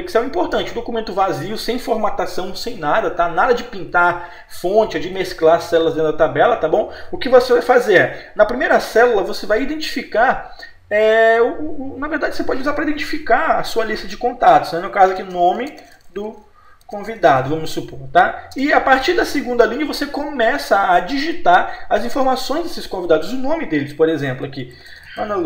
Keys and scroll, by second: 15.4 m, 18.6 Return.